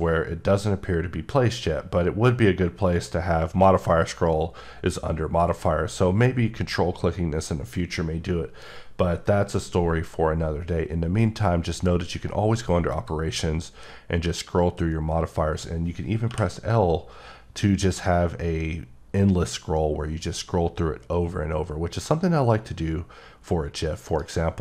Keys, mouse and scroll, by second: 12.9 click, 13.6-14.9 scroll up 11, 15.8-16.3 scroll down 2, 16.3 l, 17.3 scroll up 2, 17.9-18.5 scroll up 10, 18.9-21.9 scroll up 17, 21.9-24.1 scroll up 12, 24.1 right click, 24.5 scroll down 3.